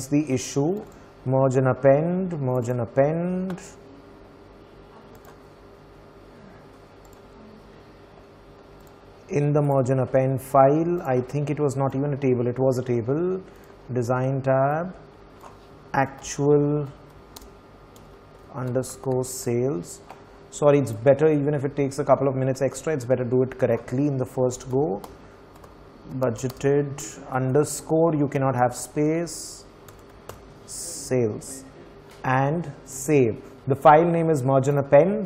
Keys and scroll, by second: 15.8-19.8 typing, 23.9-29.3 typing.